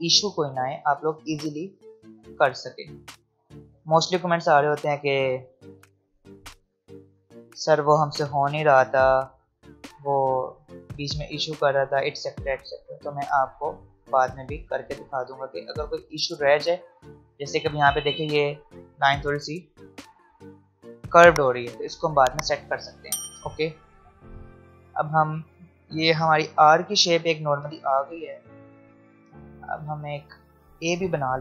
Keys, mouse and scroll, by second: 1.7 alt+scroll down 1, 3.0 alt+scroll up 1, 5.5-7.0 drag, 6.4 click, 7.0 alt+scroll down 1, 7.4 alt+scroll up 1, 8.3-9.7 drag, 9.7 alt+scroll down 1, 11.2 alt+scroll up 1, 12.6 alt+scroll down 1, 14.2 space, 14.6 click, 14.7 space, 23.9 space, 24.7 click, 24.9 space.